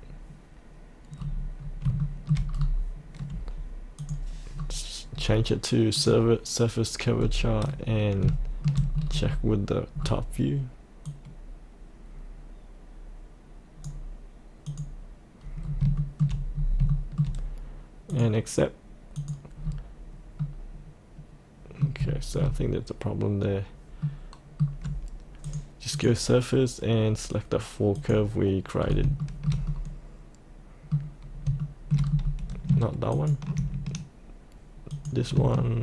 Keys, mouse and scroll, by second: 1.1-1.8 scroll up 1, 2.0 shift+middle click, 2.5-4.0 scroll up 1, 4.0 click, 4.5-5.9 scroll down 1, 5.9 click, 7.2-8.2 scroll up 1, 8.3 shift+middle click, 8.9-11.1 scroll down 1, 11.1-13.5 drag, 13.5 click, 15.6 scroll up 1, 15.9 shift+middle click, 16.5 scroll up 1, 16.9 shift+middle click, 18.1 click, 19.6 scroll up 1, 20.4-22.0 middle drag, 22.1 shift+middle click, 25.4 click, 28.8 scroll up 1, 29.2-31.4 shift+middle drag, 31.6 shift+middle click, 32.2-32.7 scroll down 1, 33.1 ctrl+click, 34.9 click.